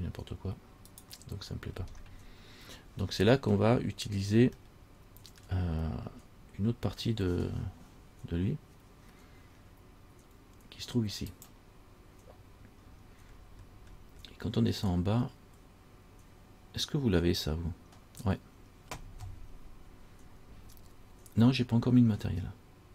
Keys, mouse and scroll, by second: 2.1-3.4 scroll down 2, 3.4-4.6 scroll down 2, 4.9 shift+middle click, 11.5 click, 13.0-14.9 scroll down 17.